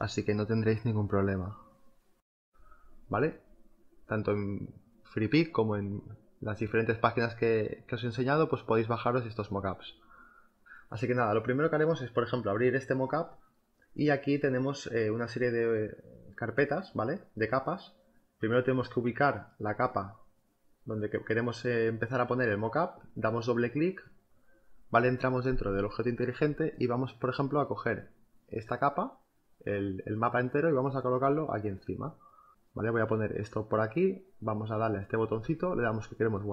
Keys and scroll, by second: 7.2 space, 28.2 m, 29.6 v, 32.3 ctrl+t, 34.9 Return.